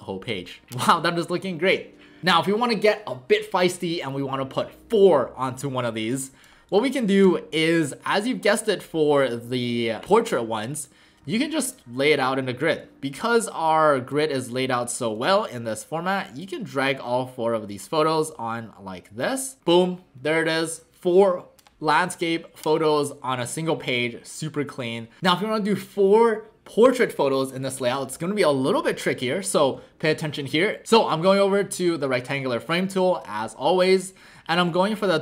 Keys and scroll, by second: 7.2 w, 30.8 Delete, 30.8 v.